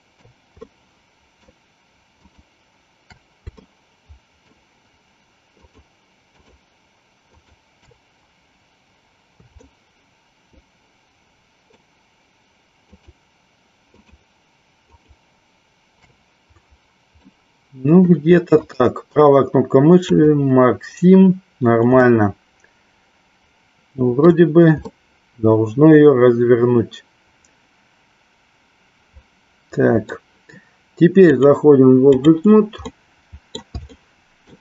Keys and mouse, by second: 0.7-1.7 shift+middle drag, 2.3 shift+click, 3.8 shift+middle click, 5.6 shift+click, 6.6 shift+click, 7.6 shift+click, 9.7-12.1 shift+middle drag, 13.1 shift+click, 14.2 shift+click, 15.1 shift+click, 17.5 middle click, 18.6-20.3 right drag, 22.1-24.5 middle drag, 25.0-30.0 middle drag, 31.2-32.2 drag, 33.0 middle click, 34.1 shift+middle click.